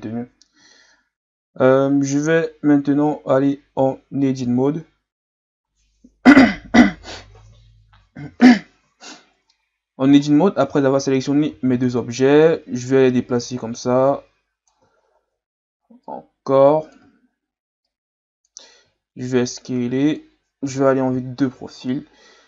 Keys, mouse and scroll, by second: 0.8-1.4 scroll up 3, 1.4-3.4 scroll up 1, 3.4-3.7 scroll up 2, 3.7 Tab, 10.3-10.7 scroll down 2, 10.7-11.5 scroll up 4, 11.5 a, 11.8 a, 12.5-13.5 scroll down 1, 13.5-15.1 drag, 15.1-16.1 shift+scroll up 1, 16.1-17.2 drag, 17.2-17.9 scroll up 5, 17.9 click, 18.8 s, 20.7 KP_3, 21.4-21.9 shift+scroll up 4, 21.9-22.4 scroll down 1.